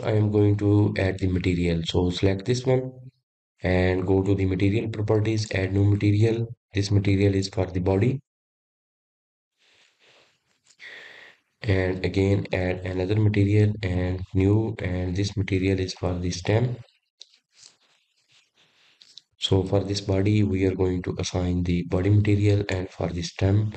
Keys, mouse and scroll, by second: 0.0-1.0 middle drag, 1.0 click, 1.7-4.8 middle drag, 5.7 click, 6.9-7.7 drag, 7.8-11.0 drag, 12.9 click, 14.2-16.4 drag, 16.6-19.8 drag, 20.9 click, 21.2 click, 22.3-23.7 drag.